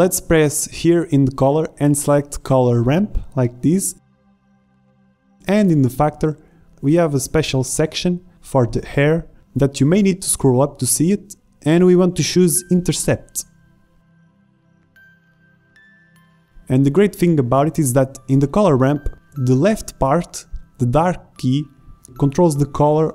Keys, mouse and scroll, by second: 3.9-8.0 drag, 8.1-9.5 drag, 16.2 click, 18.2-21.1 drag, 21.5-23.1 drag.